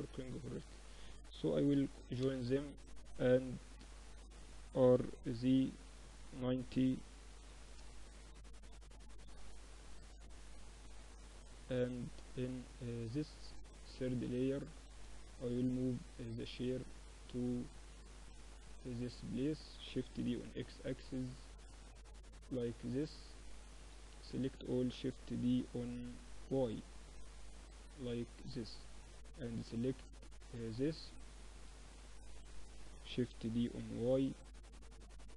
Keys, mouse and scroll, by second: 0.7 ctrl+j, 1.2 Tab, 1.8 Tab, 2.4 Tab, 3.0 Tab, 3.9 r, 7.2-9.1 middle drag, 7.8 KP_7, 9.1-10.9 drag, 11.1-14.2 drag, 13.1 z, 13.6 z, 14.0 z, 14.4-19.1 drag, 19.2 shift+d, 22.4-24.6 middle drag, 24.6 shift+d, 27.7 middle click, 28.4-30.8 drag, 30.9 z, 31.6 z, 32.6 shift+d.